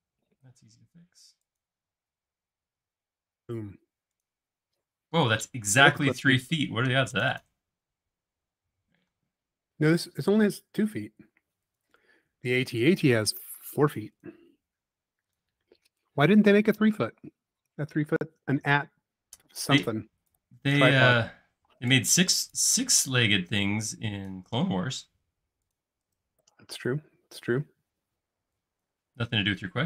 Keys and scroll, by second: 4.7 space, 8.8 shift+q, 10.5 shift+q, 19.6 e, 21.5-23.2 typing, 24.9 space, 28.3 e.